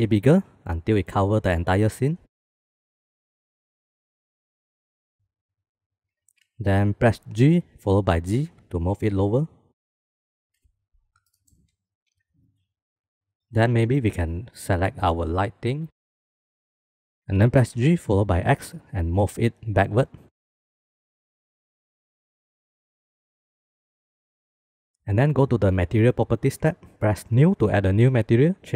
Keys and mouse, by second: 2.9 s, 4.8 shift+click, 5.0 shift+middle click, 7.7 g, 10.9 shift+middle click, 13.1 shift+middle click, 13.6 click, 14.9 click, 15.4 click, 16.0 KP_0, 16.6 g, 17.9 g, 23.1-23.6 shift+middle drag, 26.3 click, 27.4 click.